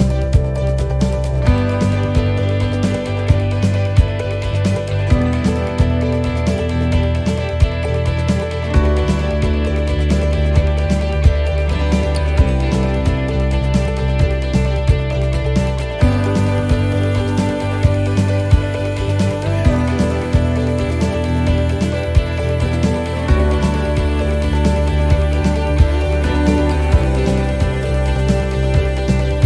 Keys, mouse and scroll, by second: 1.2 right click, 1.2 l, 2.1 shift+d, 4.3 middle click, 5.1 shift+middle click, 7.8 right click, 9.4 click, 11.6 right click, 12.4 click, 14.4 right click, 15.9 right click, 16.7 click, 18.0 right click, 19.7 right click, 21.3 right click, 22.6 right click, 24.3 right click, 25.6 click, 27.2 middle click, 28.0 shift+middle click.